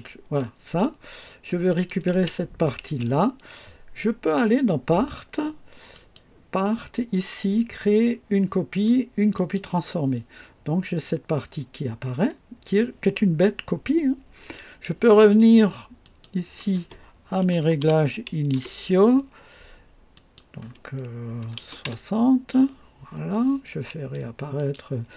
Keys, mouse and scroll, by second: 1.6 click, 2.0 space, 2.0 space, 2.7 space, 5.8 click, 9.3 click, 15.9 click, 17.3 KP_1, 17.5 KP_2, 17.7 KP_0, 18.4 KP_Enter, 18.4 Return, 20.0 click, 21.3 KP_6, 21.5 KP_0, 21.7 Return, 24.5 click, 25.0 space.